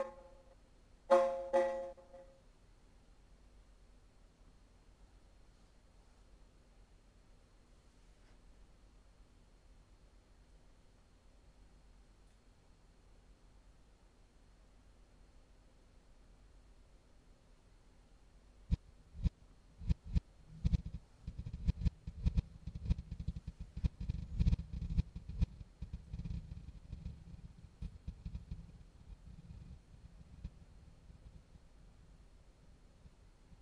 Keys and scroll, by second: 2.4 typing, 9.7-12.2 typing, 17.4 w, 17.4 space, 22.3 space, 23.5 super+c, 26.1 super+v, 28.5 super+v, 30.9 super+v, 33.5 super+v.